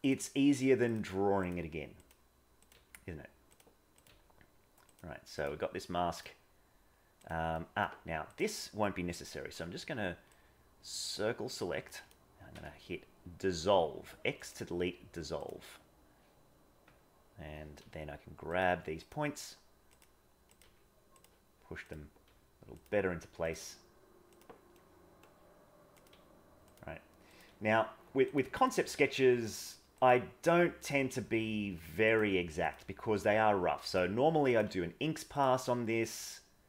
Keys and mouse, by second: 0.2 g, 1.4 click, 1.5 g, 7.6 middle drag, 17.7 g, 19.0 click, 19.2 g, 23.4 click, 24.8-25.2 middle drag, 25.9 click, 27.3 click, 27.3 g, 27.4 g, 32.6 click, 32.7 g, 34.4 click.